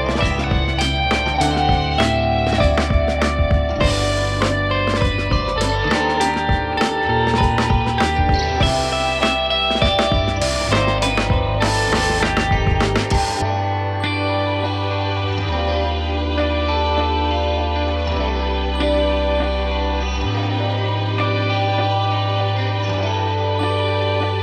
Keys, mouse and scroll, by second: 5.4 scroll up 1, 5.7-7.2 shift+middle drag, 9.2 3, 9.4 click, 10.2-11.3 scroll down 1, 11.3 i, 12.7-14.3 middle drag, 14.4 e, 16.3 ctrl+z, 17.4 middle click, 17.7-19.1 scroll up 1, 21.9 click, 22.5 click, 23.3 Tab, 23.5 scroll down 1, 23.7 middle click, 24.3 KP_1.